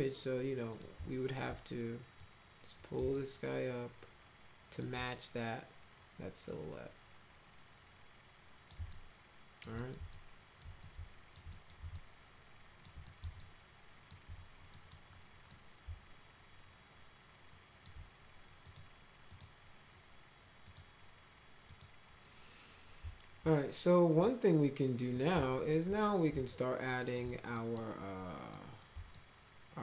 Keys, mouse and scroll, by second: 0.6 click, 1.1 alt+middle click, 2.1 click, 3.1-4.8 alt+middle drag, 6.4-8.6 drag, 8.8 alt+middle click, 9.7 middle click, 10.1 alt+middle click, 10.8 alt+middle click, 11.5 middle click, 11.9 alt+middle click, 13.0 middle click, 13.3 alt+middle click, 14.6 middle click, 15.4-17.8 middle drag, 18.6 click, 19.2 click, 20.6 click, 21.6 click, 24.1 click, 25.1 click, 25.4 alt+middle click, 25.9 middle click, 26.5 alt+middle click, 27.5 middle click, 28.5 middle click, 29.1-29.8 alt+middle drag.